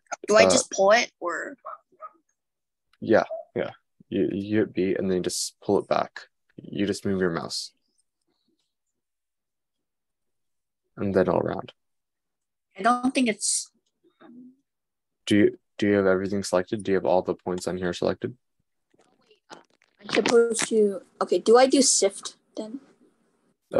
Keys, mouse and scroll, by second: 0.1 click, 4.9 super+b, 16.4 super+z.